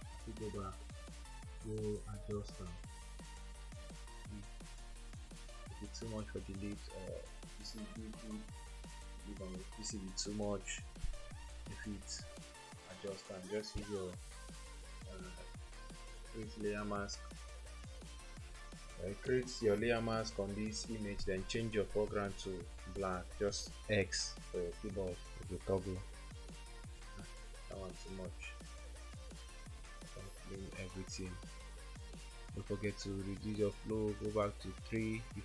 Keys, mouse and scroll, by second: 22.4 x, 25.4 ], 26.5 double click, 28.0 ctrl+z, 29.8 ctrl+z.